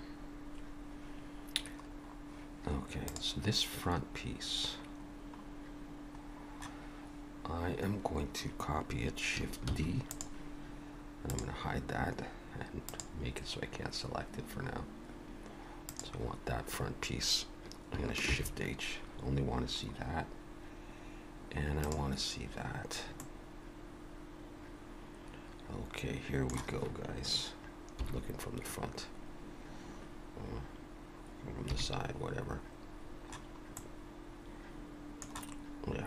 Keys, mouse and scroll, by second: 1.8-3.1 scroll up 2, 3.1 click, 4.5-4.9 scroll down 2, 5.2-6.1 scroll down 2, 6.3-8.5 scroll down 1, 9.7 shift+d, 11.3 click, 12.9 click, 15.9 click, 18.2 shift+h, 19.9-21.3 scroll up 2, 21.3-21.8 scroll up 1, 21.8 click, 22.6-23.0 scroll up 2, 23.2 middle click, 27.9 KP_1, 31.7 KP_3, 33.0-33.8 scroll down 1, 33.8 middle click.